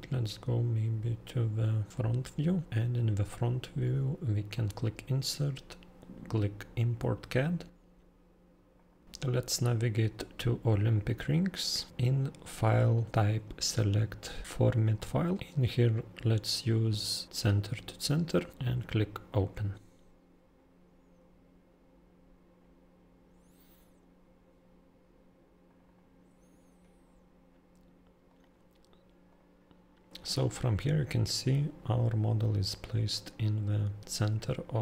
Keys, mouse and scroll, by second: 1.9 click, 2.4 click, 4.6 click, 8.8 click, 10.7 click, 11.0 click, 11.9 click, 14.5 click, 19.3 click, 22.1-23.4 scroll down 19, 23.4-24.5 scroll, 25.7 click, 25.9 click, 26.8-27.7 scroll, 28.3 click, 29.3 click.